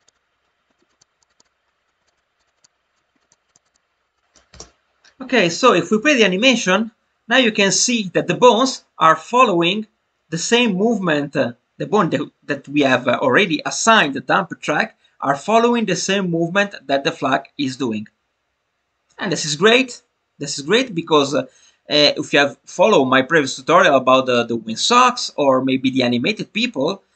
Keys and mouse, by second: 0.1 click, 0.8 click, 1.3 click, 1.4 click, 2.1 click, 2.4 click, 2.6 click, 3.3 click, 3.6 click, 3.7 click.